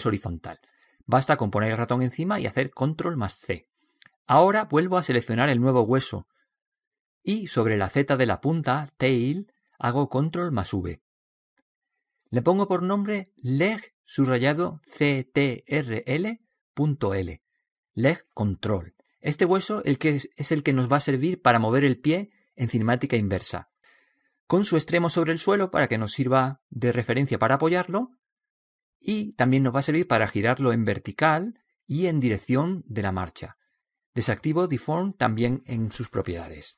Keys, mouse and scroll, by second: 5.4 right click, 11.0 ctrl+v, 14.5-17.2 drag, 25.5-27.3 drag, 35.1-36.7 drag.